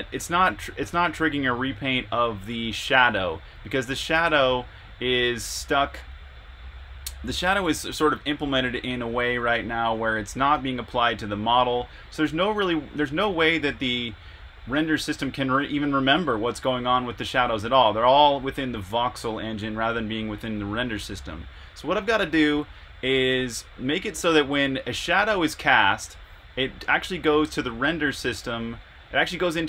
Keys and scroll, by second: 4.6 e, 6.0 r, 9.7 e, 10.7 e, 11.2 e, 12.4 typing, 13.8-15.0 typing, 25.2-27.6 typing, 28.7-29.6 typing.